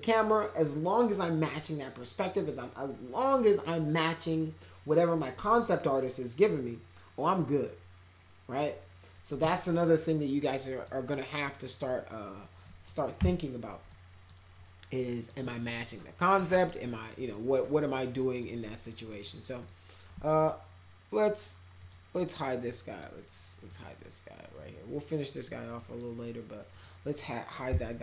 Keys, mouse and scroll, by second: 10.6 middle click, 11.2 middle click, 12.6 middle click, 13.1 p, 13.8 middle click, 15.0 middle click, 16.6 middle click, 17.3-18.3 middle drag, 19.0 middle click, 19.6 right click, 21.8 click, 22.9 click, 23.6 right click, 25.2 click, 25.7 middle click, 26.7 click, 27.0 middle click, 27.6 f.